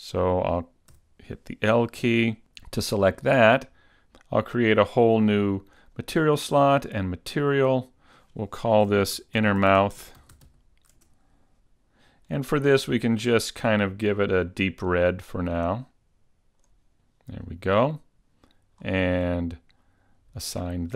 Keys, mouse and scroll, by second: 1.0 l, 4.0 click, 4.0 scroll up 2, 5.8 click, 7.3 click, 8.2 click, 9.6 n, 11.8 click, 13.1 click, 18.8-19.3 scroll down 4, 19.3-20.9 scroll up 7.